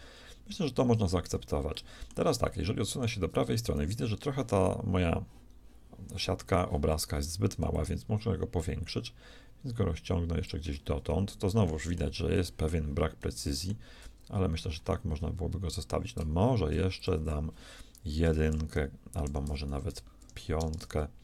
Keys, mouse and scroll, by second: 7.7-9.8 drag, 11.7 shift+middle click, 17.0-18.9 drag, 19.3 Return, 20.8 BackSpace.